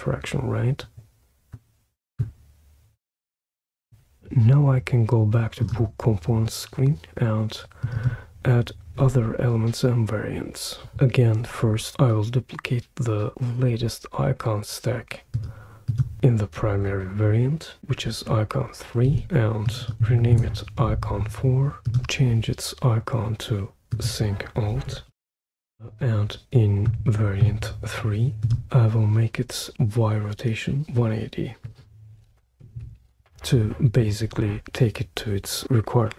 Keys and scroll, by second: 19.0 super+d, 20.0 typing, 20.3 Return, 24.6-26.4 typing, 32.3-33.3 typing, 33.4 Return.